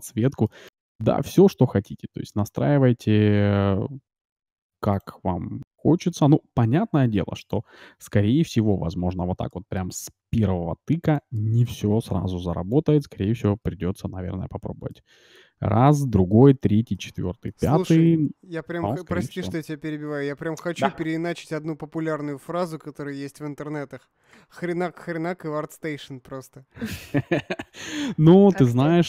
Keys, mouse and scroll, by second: 0.5-2.3 middle drag, 1.0 s, 5.0-6.7 drag, 6.3 s, 8.1 KP_Decimal, 8.8 middle click, 9.5 middle click, 10.2 g, 12.6-14.0 drag, 12.8 middle click, 13.6 shift+z, 14.2 click, 14.6 middle click, 17.2 middle click, 18.4 middle click, 18.6 middle click, 18.8 middle click, 28.6 middle click.